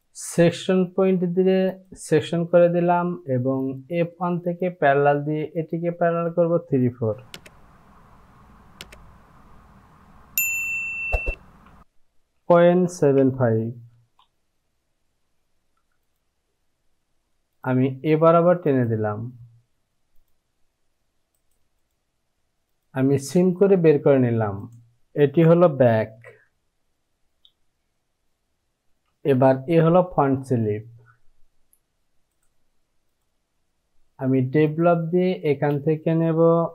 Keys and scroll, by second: 12.4 KP_Decimal, 12.9 KP_7, 13.9 KP_5, 26.5 j, 29.2 Home, 35.5 space.